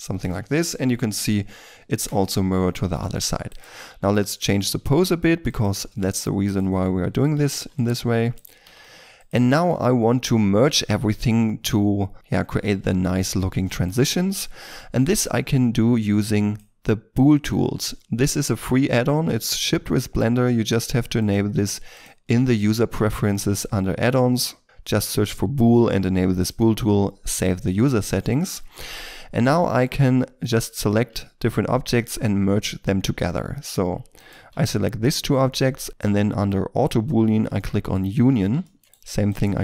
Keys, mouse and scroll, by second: 2.3-2.9 scroll down 1, 2.9 shift+middle click, 3.4 right click, 3.8 r, 4.5 r, 4.7 r, 5.7 r, 6.4 right click, 6.7 r, 7.3 r, 7.5 r, 8.3 right click, 8.6 r, 8.8 r, 9.5 shift+middle click, 9.9 middle click, 12.9-13.6 scroll up 1, 13.6 shift+middle click, 24.6 l, 29.1 middle click, 29.7 shift+middle click, 31.1 shift+middle click, 34.1 shift+right click, 38.6 shift+middle click, 38.8 right click, 39.2 shift+right click.